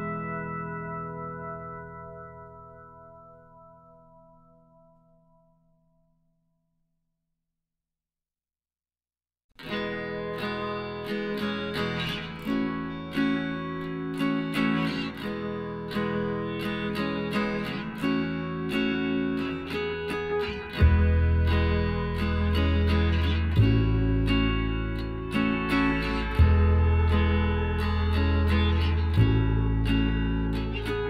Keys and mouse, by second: 2.1-3.6 middle drag, 3.6-6.2 drag, 4.7 z, 6.2 right click, 6.2 b, 7.7-9.3 drag, 9.6-11.2 right drag, 9.9 b, 11.5-13.2 drag, 13.2 middle click, 14.2-16.2 right drag, 15.0 b, 16.2 g, 17.5-19.2 right drag, 18.3 b, 20.0 g, 23.1 middle click, 23.4-25.2 right drag, 24.2 b, 25.5 g, 28.3-30.4 right drag, 29.1 b, 30.4 g.